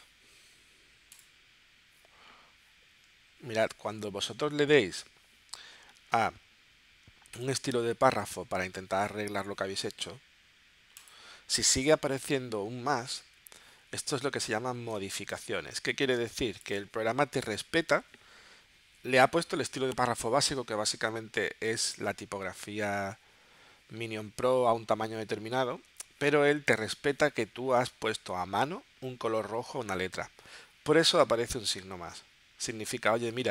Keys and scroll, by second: 3.8 super+z, 15.0 space, 16.2 space.